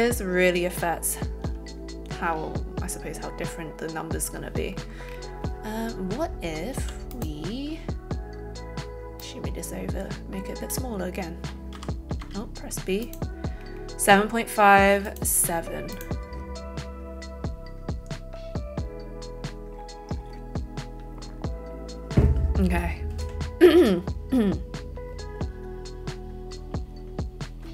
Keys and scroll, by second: 11.8 n, 12.2 b.